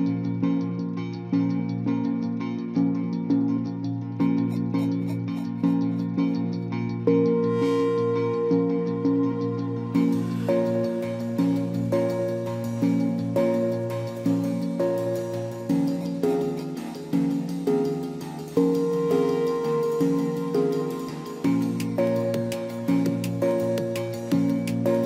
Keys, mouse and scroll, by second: 8.3 ctrl+j, 20.1 ctrl+=.